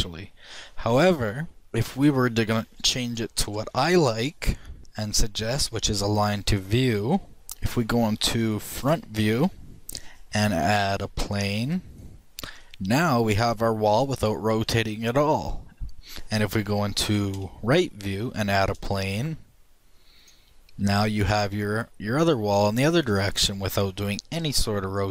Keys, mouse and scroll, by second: 1.6 x, 9.3 KP_1, 11.2 shift+a, 13.0-14.1 middle drag, 15.9-16.9 middle drag, 17.9 KP_3, 19.1 shift+a, 21.2 shift+middle click, 23.0 middle click, 23.2 middle click, 23.7-25.1 shift+middle drag.